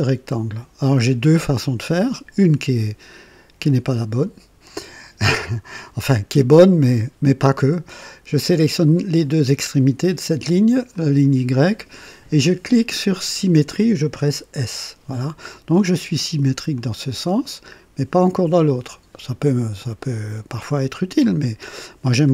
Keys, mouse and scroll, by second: 4.6 click, 6.8 click, 10.9 click, 14.5 s, 16.7-22.3 drag.